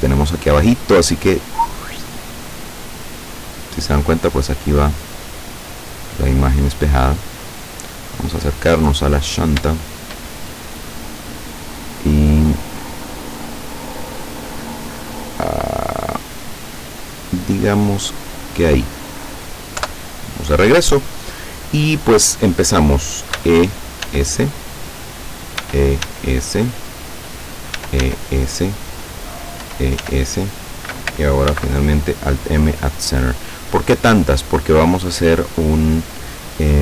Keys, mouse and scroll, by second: 0.5 scroll down 1, 1.3-4.2 drag, 6.4-7.8 drag, 8.0-8.5 scroll up 1, 8.6-9.0 scroll up 1, 9.3 middle click, 9.8-11.6 shift+middle drag, 11.8-13.1 middle drag, 13.1-13.9 scroll up 2, 13.9 click, 14.8-16.5 middle drag, 17.1-18.7 drag, 18.8 middle click, 19.9 KP_7, 23.4 e, 24.1 s, 25.3 click, 25.7 e, 26.1 s, 27.4 click, 27.8 e, 28.1 s, 29.1 click, 29.7 e, 30.1 s, 30.8 click, 31.6 alt+m, 32.2 alt+click, 33.0-34.2 middle drag, 34.2-34.6 scroll up 1, 34.7-35.8 middle drag.